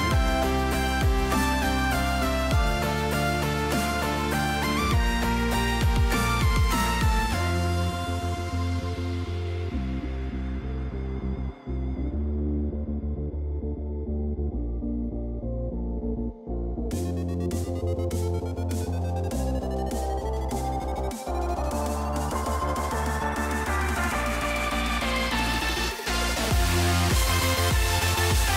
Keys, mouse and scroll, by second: 1.1 shift+middle click, 1.9 middle click, 2.7 shift+middle click, 3.1 shift+middle click, 4.1 shift+middle click, 4.7 g, 5.3 click, 5.5 click, 6.2 g, 7.1 y, 7.6 g, 9.0 shift+middle click, 9.3 click, 9.9 g, 12.2 shift+middle click, 12.6 shift+middle click, 13.3 middle click, 13.7 shift+middle click, 13.9 shift+middle click, 14.4 shift+middle click, 14.9 shift+middle click, 16.2 y, 17.2 middle click, 17.6 middle click, 19.6 click, 21.6 s, 23.7 middle click, 24.1 shift+middle click, 25.2 shift+click, 25.5 shift+middle click, 25.9 shift+middle click, 26.2 shift+middle click, 27.3 s.